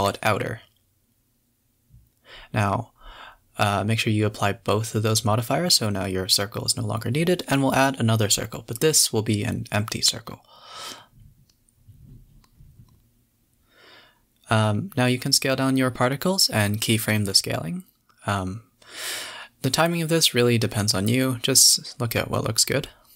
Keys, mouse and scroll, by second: 0.1 scroll up 3, 1.5 click, 1.7 click, 2.2 click, 2.7 click, 3.6 click, 4.1 click, 5.1 click, 5.4 x, 5.9 shift+a, 8.1 r, 10.3 s, 11.6 click, 12.2 s, 13.5-14.4 drag, 14.4 s, 17.5-18.4 drag, 18.5-20.4 drag, 20.4 s.